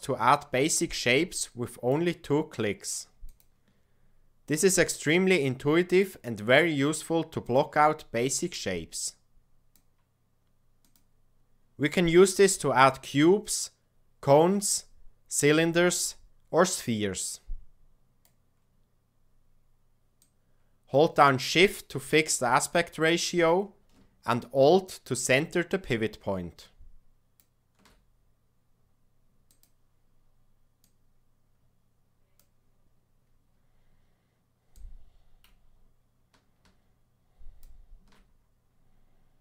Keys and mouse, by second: 4.6-7.5 drag, 8.5-10.9 drag, 12.5-18.2 drag, 20.2-29.6 drag, 30.8-32.5 drag, 34.1-37.7 drag.